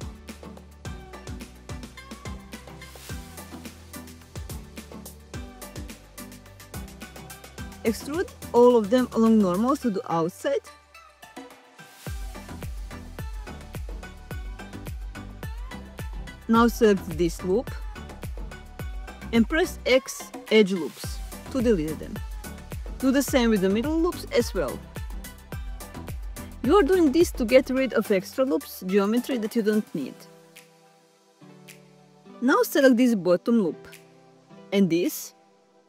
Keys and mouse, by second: 0.6 ctrl+z, 5.0 alt+shift+click, 8.1 alt+e, 13.9 middle click, 15.4 2, 16.8 x, 22.8 alt+click, 23.6 x, 32.5 alt+click, 33.8 alt+shift+click, 34.2 middle click, 34.8 middle click.